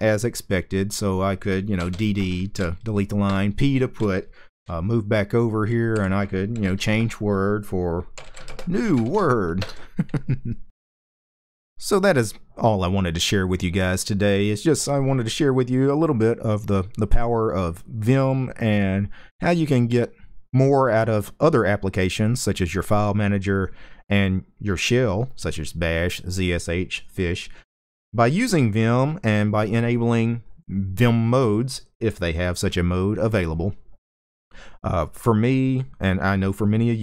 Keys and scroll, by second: 1.5 d, 1.6 d, 2.9 p, 4.3-9.8 typing.